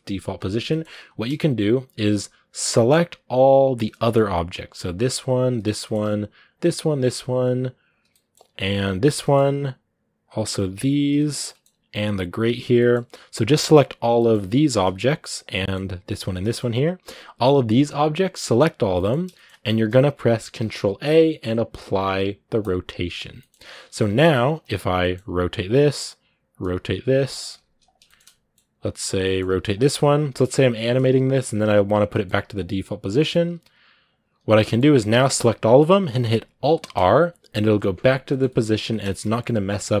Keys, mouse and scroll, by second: 0.8-1.5 scroll up 1, 1.5-2.7 scroll up 1, 2.7-3.6 scroll up 1, 3.6 shift+right click, 3.9 middle click, 4.1-4.9 scroll up 1, 4.9 shift+right click, 5.5 scroll down 1, 5.7 middle click, 6.4-8.0 shift+right drag, 8.0 middle click, 8.8 shift+right click, 9.1-10.1 middle drag, 10.1-11.3 shift+right drag, 11.3 middle click, 12.0 shift+right click, 12.6 scroll down 1, 12.7 middle click, 13.0 g, 14.0 middle click, 14.6 shift+right click, 14.7 g, 15.4 middle click, 16.1 shift+right click, 16.2 scroll down 2, 16.3 middle click, 16.5 g, 18.8 middle click, 19.0-19.6 scroll up 2, 19.2 shift+middle click, 19.6-22.6 middle drag, 22.6 ctrl+a, 23.2 middle click, 23.6 a, 24.4 right click, 24.9 middle click, 25.1 r, 25.7 scroll down 2, 26.3 right click, 26.5 r, 27.9-29.0 shift+middle drag, 29.0 right click, 29.1 middle click, 29.3 r, 30.4 right click, 30.6 r, 31.3 right click, 31.4 r, 32.0 middle click, 32.3 r, 32.9 right click, 33.0 middle click, 33.3 r, 33.9 right click, 34.1 r, 34.5 middle click, 35.0 a, 38.1 middle click, 38.5 scroll up 2, 38.5 a, 38.8 shift+middle click, 39.4 scroll up 2, 39.8-40.0 middle drag.